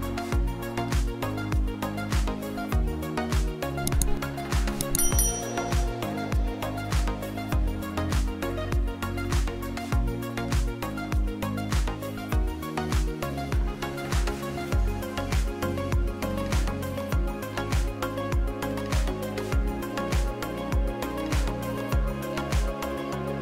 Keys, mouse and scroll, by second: 1.3 n, 2.0 middle click, 3.1 click, 3.2 middle click, 4.2-4.5 shift+middle drag, 5.4-6.1 shift+middle drag, 6.2 middle click, 6.5 shift+drag, 6.8 middle drag, 7.1 shift+click, 7.3 drag, 7.7-8.0 shift+drag, 8.1 click, 8.6 shift+click, 9.3 shift+middle click, 9.6 middle click, 10.0 shift+middle click, 10.9 space, 11.1 space, 12.0 click, 12.9 shift+click, 13.9 click, 14.4 n, 15.4 space, 15.9 space, 18.1-19.9 drag, 20.7 m, 21.2-21.6 drag, 23.0 space.